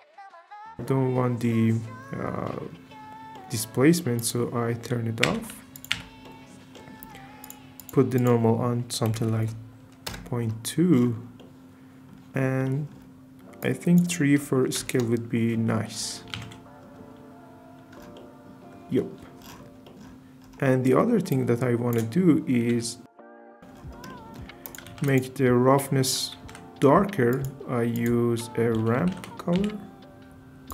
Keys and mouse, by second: 1.4 middle click, 4.2 click, 5.3 m, 5.7 click, 5.9 m, 6.2-6.8 middle drag, 7.4 click, 7.8 click, 8.3-10.1 drag, 12.6 middle click, 13.7-14.9 drag, 16.3 alt+shift+z, 18.1-18.7 shift+drag, 21.3 click, 22.7 g, 24.1 click, 24.6 click, 24.9 shift+a, 26.4 shift+a.